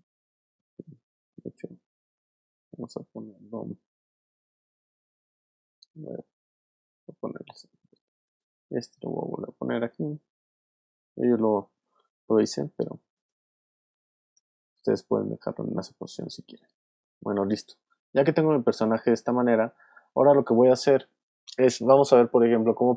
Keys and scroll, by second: 4.9 super+z.